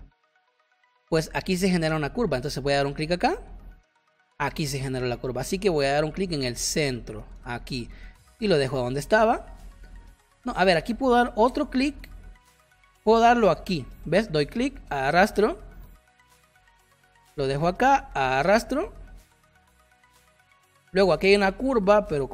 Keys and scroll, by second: 5.4 ctrl+z, 7.4 space, 19.9 space.